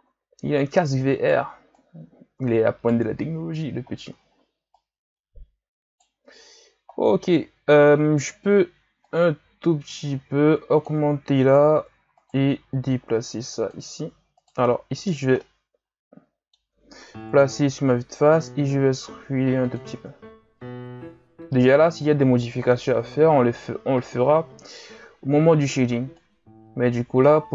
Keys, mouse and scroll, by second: 0.5 right click, 1.7 right click, 3.2-3.9 scroll up 3, 3.9-4.2 scroll down 2, 4.2-4.7 shift+scroll up 1, 4.7 right click, 6.9-9.0 scroll down 4, 9.0-11.2 drag, 11.2 scroll up 4, 12.2 right click, 12.9-14.0 drag, 14.0 ctrl+z, 14.3 right click, 15.4-17.2 middle drag, 17.2 KP_1, 18.3 e, 20.0 Tab, 20.4 a, 20.7-21.9 scroll down 2, 21.9 right click, 23.2 ctrl+KP_3, 25.3 Tab, 26.1 right click.